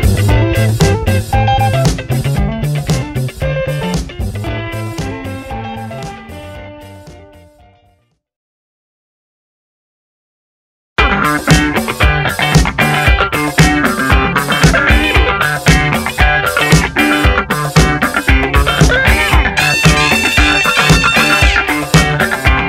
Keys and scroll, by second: 0.5 F9, 3.1-5.6 typing, 5.0 ctrl+Return, 5.7 Down, 5.8 Right, 6.6 Down, 7.0 ctrl+t, 13.4 Return, 14.7-15.6 typing, 15.9 Return.